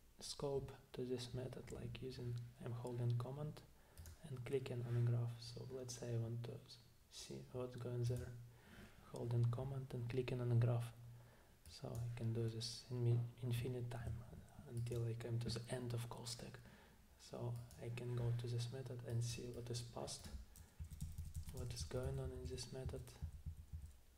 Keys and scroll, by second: 20.8 Down, 21.0 Down, 21.2 Down, 21.4 Down, 21.6 Down, 21.8 Down.